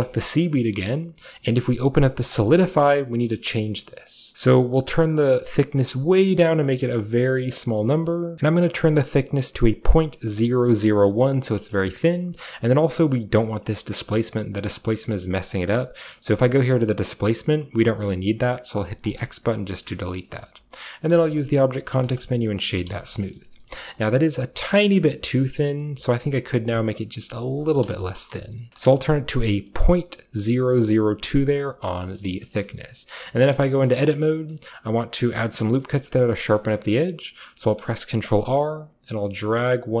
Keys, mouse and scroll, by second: 2.3-4.2 drag, 4.2 middle click, 4.9-8.3 shift+drag, 8.3 Return, 8.3-9.4 scroll up 1, 8.3 typing, 9.4-9.8 scroll up 1, 11.1-15.9 middle drag, 15.9-19.0 scroll down 1, 19.1 click, 19.6-22.1 shift+middle drag, 20.1-22.1 shift+scroll up 1, 22.1 click, 22.6-23.7 middle drag, 23.4-24.5 shift+scroll up 1, 23.9-24.6 shift+middle drag, 24.5 shift+scroll up 1, 24.7-26.9 shift+middle drag, 24.8-25.9 shift+scroll down 1, 25.9-26.8 shift+scroll down 1, 26.8 shift+scroll down 1, 26.9-28.3 drag, 28.3 BackSpace, 28.7 Return, 29.0-31.1 drag, 31.5 click, 32.2 middle click, 32.5 shift+middle click, 32.7-33.7 shift+middle drag, 33.7-35.4 shift+scroll up 2, 33.9 shift+middle click, 34.5-35.8 shift+middle drag, 36.0-37.6 middle drag, 37.6 ctrl+r, 38.8-40.0 drag.